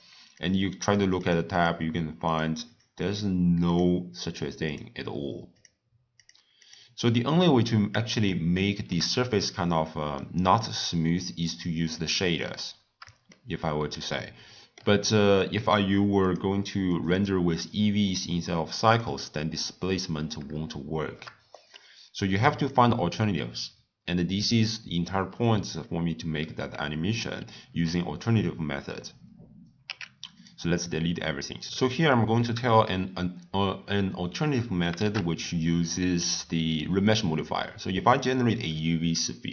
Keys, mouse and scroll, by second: 0.3 click, 0.8 click, 1.2 drag, 1.5 click, 2.2 click, 2.6 click, 3.0 click, 3.6 click, 4.6 click, 5.5 click, 6.1 click, 6.6 click, 8.2-12.4 shift+middle drag, 13.3-16.2 shift+middle drag, 16.2 click, 16.9-18.9 drag, 20.7-21.5 shift+middle drag, 21.5 click, 22.1 click, 29.8 x, 31.7-34.8 shift+middle drag, 35.0 shift+a.